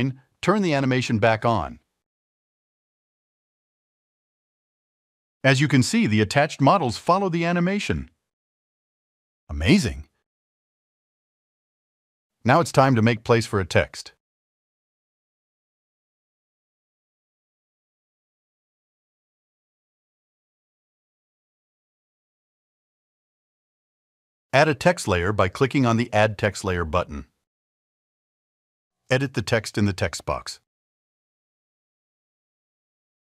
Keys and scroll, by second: 6.9 alt+2, 16.3 alt+1, 18.3 alt+2, 30.1-33.3 typing.